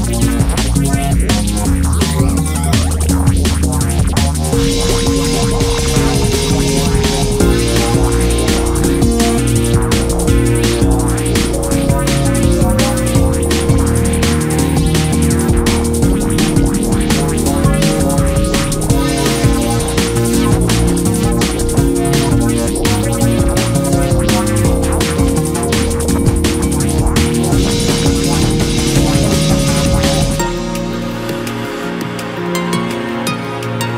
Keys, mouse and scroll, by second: 6.5-7.4 ctrl+KP_Add, 8.4 o, 8.9-9.9 scroll up 1, 9.9 click, 11.7 click, 12.3 click, 14.0 click, 14.8 click, 16.8 click, 17.7 click, 18.8 click, 19.3 click, 20.2 click, 20.9 click, 22.0 click, 22.6 click, 23.6-24.2 scroll down 2, 24.2 KP_1, 25.6 click, 25.8 click, 27.1 e, 28.1 s, 31.2 KP_3, 31.7-32.5 scroll up 2, 32.5 click, 33.7 click.